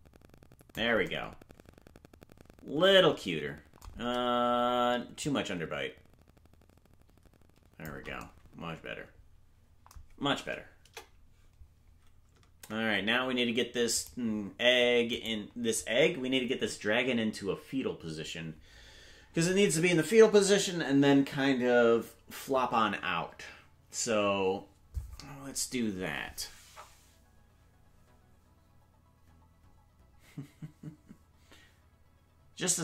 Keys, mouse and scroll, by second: 5.1-7.8 drag, 10.8 KP_0, 14.1 right click, 18.7 right click.